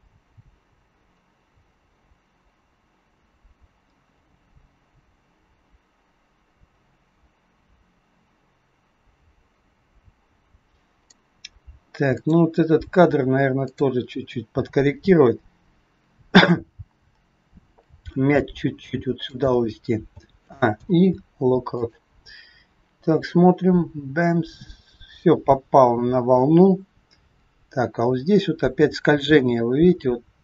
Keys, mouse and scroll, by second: 12.1 click, 17.7 g, 20.1 a, 20.6 i, 23.3 click.